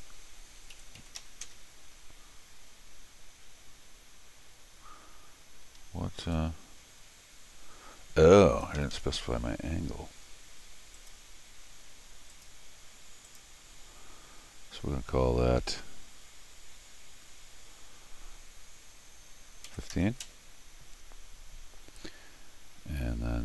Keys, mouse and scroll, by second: 3.2 ctrl+scroll down 2, 3.6 ctrl+scroll up 2, 5.5 ctrl+Escape, 5.8 ctrl+Escape, 6.3-8.6 ctrl+drag, 8.8 ctrl+Escape, 8.9 ctrl+Escape, 9.3 ctrl+d, 11.0 ctrl+click, 12.3 ctrl+click, 13.3 ctrl+click.